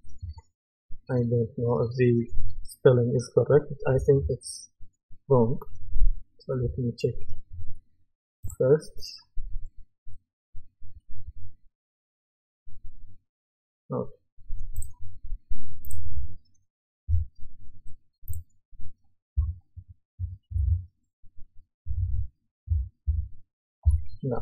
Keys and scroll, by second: 6.6 Return, 17.0 F2, 19.4 F2, 20.5 Right, 22.7 Right, 23.1 BackSpace.